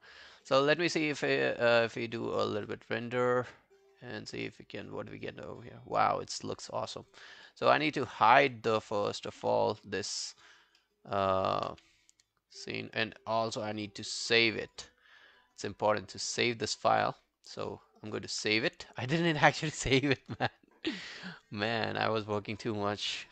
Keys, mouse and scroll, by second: 7.5 alt+middle click, 7.9 alt+right click, 8.7 alt+middle click, 9.0 alt+right click, 9.4 q, 10.4 double click, 10.8 alt+middle click, 11.2 alt+right click, 11.7 q, 17.9 alt+middle click, 18.0 alt+right click.